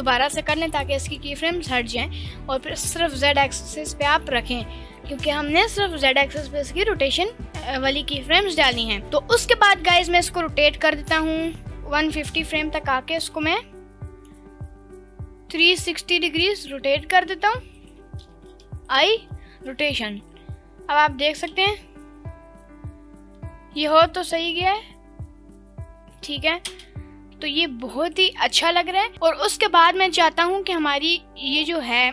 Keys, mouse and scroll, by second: 2.6-9.0 drag, 13.3 r, 17.9 ctrl+click, 18.3 i, 20.4-21.5 drag, 21.6 space, 26.7 space, 27.5 click, 31.6-32.1 drag.